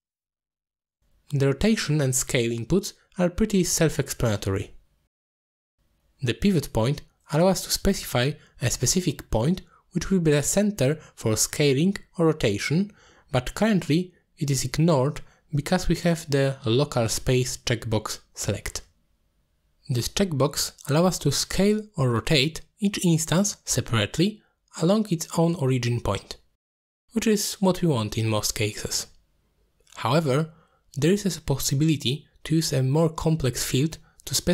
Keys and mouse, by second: 0.0 middle click, 0.9 middle click, 2.4 middle click, 4.3-5.4 drag, 6.0 click, 6.9-8.0 drag, 8.3 ctrl+z, 8.7 click, 9.8 ctrl+z, 10.3 click, 11.7 ctrl+z, 12.5 middle click, 17.4-18.4 drag, 18.7 click, 19.9 click, 21.3-23.7 drag, 24.4 ctrl+z, 25.4 click, 27.2 click, 28.2 ctrl+z, 29.0-30.6 drag, 31.1 ctrl+z, 31.9 click, 32.8-34.5 drag.